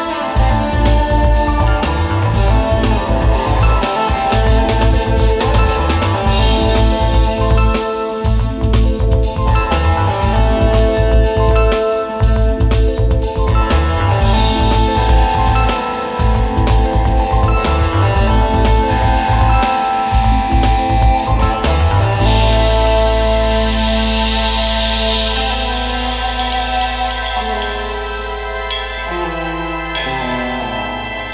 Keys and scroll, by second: 0.0 space, 1.1 space, 4.6 super+space, 5.5 space, 7.4 space, 8.8 space, 9.4 alt+super+space, 10.0 space, 11.4 space, 12.0 space, 12.6 space, 13.2 space, 14.3-15.8 typing, 17.5 space, 18.2 super+z, 19.2 super+z, 21.1 super+[, 21.5 super+], 21.8 super+], 23.4 space, 25.3 space, 26.5 alt+super+space, 27.4-29.1 typing, 28.3 super+', 30.4 super+z, 31.1 super+z.